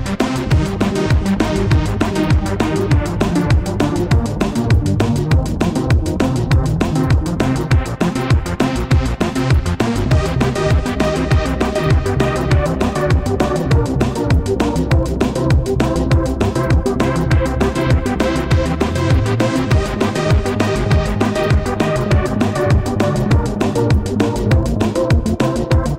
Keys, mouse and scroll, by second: 0.2 shift+click, 1.5 shift+click, 3.9 shift+click, 13.6 a, 17.3-20.1 typing, 22.1-23.8 typing.